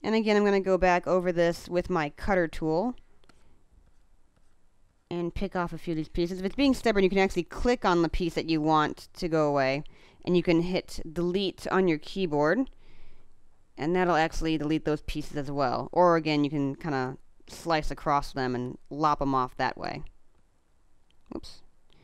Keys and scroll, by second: 5.8 space, 17.7 space, 19.8 space.